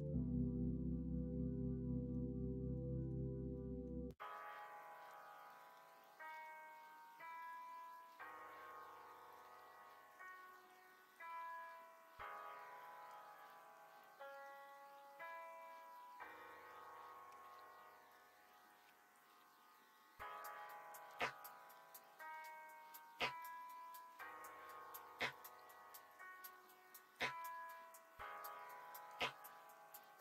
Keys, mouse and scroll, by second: 0.5-2.1 middle drag, 2.7 middle click, 3.5 middle click, 6.3 2, 6.3 g, 9.3 ctrl+z, 11.1 ctrl+z, 11.3 middle click, 11.8 shift+middle click, 12.4 middle click, 12.9 shift+middle click, 13.5 middle click, 15.9 middle click, 17.2 l, 17.4 middle click, 18.8 3, 21.1 ,, 23.4 middle click, 23.4 ', 26.0 middle click, 27.4-29.0 drag, 29.2 scroll up 1, 29.3 middle click, 29.7 scroll down 1.